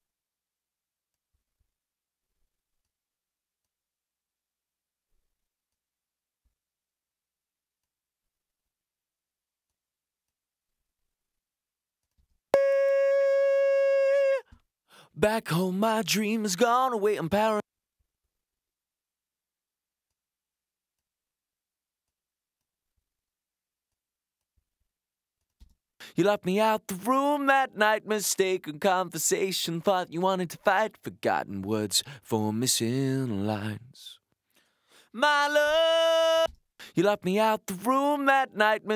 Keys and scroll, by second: 12.1 space, 17.4 space, 25.6 space, 36.2 space.